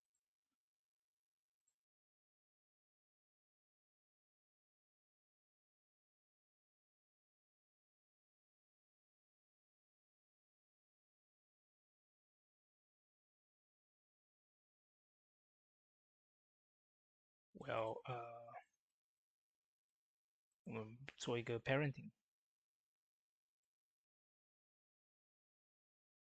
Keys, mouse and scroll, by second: 3.2 ctrl+z, 6.0-9.1 drag, 9.1 shift+d, 9.9-15.7 drag, 15.7 click, 20.4 right click, 22.7-26.3 drag.